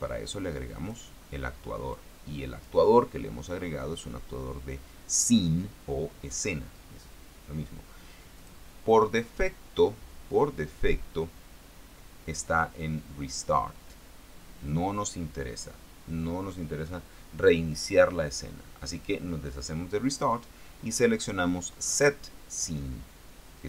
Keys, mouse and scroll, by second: 0.6 click, 2.3 click, 8.7 click.